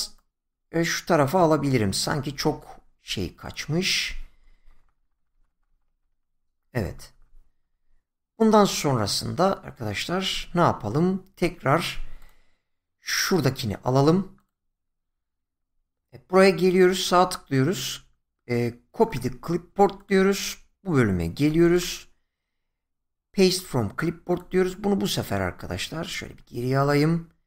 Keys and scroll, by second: 4.7 Right, 6.6 Left, 7.6 Right, 26.2 ctrl+z.